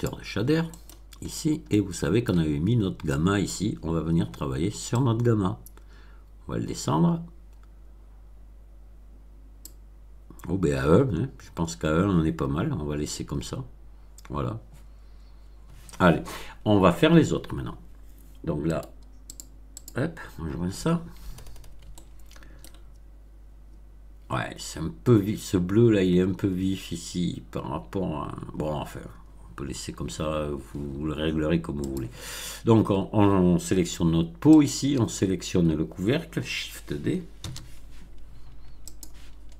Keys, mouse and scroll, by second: 0.6 middle click, 0.7-1.4 scroll down 2, 1.6-2.4 middle drag, 2.6-3.0 scroll up 1, 3.0 middle click, 3.7-4.0 scroll up 2, 4.9-9.8 drag, 17.4-17.7 scroll down 2, 18.6 middle click, 19.2 click, 19.7 click, 20.4-21.0 scroll down 4, 21.9-22.8 shift+middle drag, 31.8 click, 34.5 shift+click, 37.3 shift+d, 38.8 click.